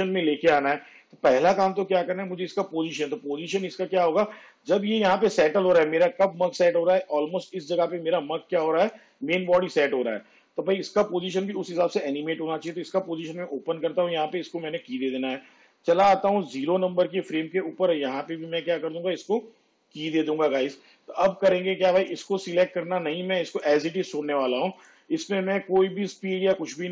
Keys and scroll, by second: 12.7 p, 17.4 Home.